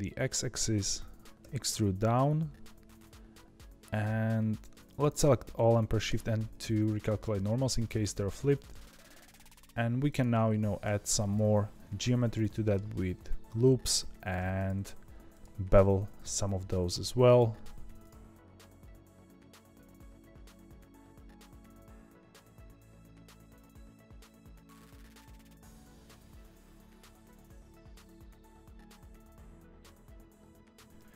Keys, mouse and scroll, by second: 1.3 ctrl+x, 1.3 e, 5.1 a, 6.0 shift+n, 8.0-9.3 shift+middle drag, 9.3 ctrl+r, 10.5 ctrl+r, 12.0-12.4 scroll up 1, 12.4-14.3 middle drag, 14.3 1, 14.5 click, 15.0 2, 15.2 click, 15.8 ctrl+b, 17.4-17.9 scroll up 1, 17.9 click, 18.4 click, 18.5 g, 18.9 click, 19.0 g, 19.3 click, 19.4 ctrl+b, 19.9 click, 20.1 ctrl+b, 20.7 click, 20.9 g, 21.2 click, 21.4 g, 21.7 click, 21.9 ctrl+b, 22.3 click, 22.4 ctrl+b, 23.3 2, 23.3 click, 23.5 middle click, 24.0 shift+click, 24.2 ctrl+b, 24.7 1, 24.8 click, 24.9 g, 25.7 click, 25.9 ctrl+b, 26.7 click, 26.7-29.7 typing, 27.1 click, 27.7 click, 27.9 click, 28.3 click, 28.5 ctrl+b, 29.2 click, 29.6 click, 30.7 Tab, 30.9-31.1 shift+middle drag.